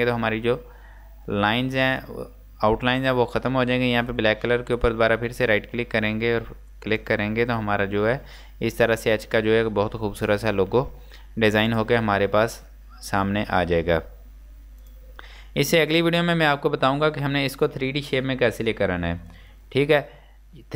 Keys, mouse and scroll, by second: 0.7-1.2 scroll up 1, 4.8 right click, 7.0 click, 7.6 scroll down 1, 8.5 scroll up 1, 9.0-9.5 scroll down 1, 11.1-11.8 scroll up 1, 11.8 click, 14.9 click.